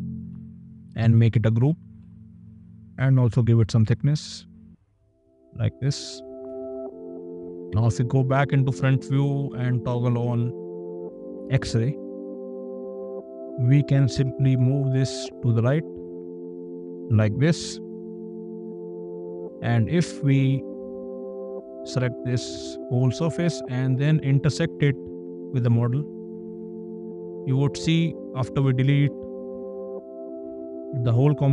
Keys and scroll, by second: 0.5 space, 2.3 ctrl+g, 3.3 p, 6.7 space, 7.9 !, 11.3 x, 13.0 Escape, 14.1 m, 18.3 space, 19.1 x, 27.9 d, 29.3 shift+1.